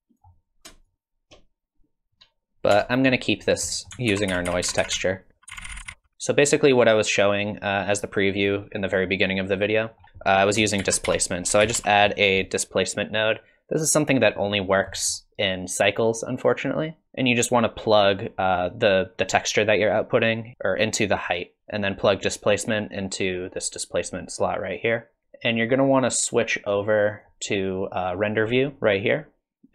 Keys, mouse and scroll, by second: 0.8 shift+click, 2.5 ctrl+z, 2.5 click, 2.7 Tab, 3.5 scroll down 5, 3.7 middle click, 4.2 ctrl+z, 4.3-4.8 ctrl+z, 4.9-5.9 ctrl+z, 9.9 middle click, 10.1 click, 10.8 shift+a, 14.7 scroll down 2, 14.9 middle click, 16.2 click, 20.6 click, 21.4 click, 21.7 click, 24.8 click, 26.4 click, 29.2 click.